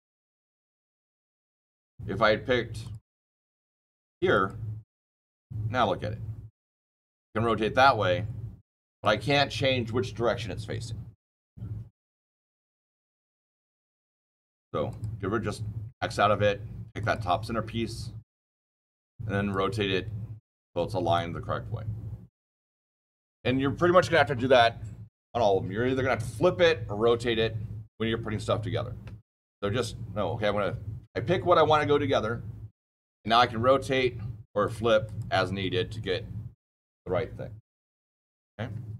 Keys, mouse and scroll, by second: 2.7 click, 4.2 click, 6.5 click, 14.8 click, 16.9 click, 19.4 right click, 34.6 click.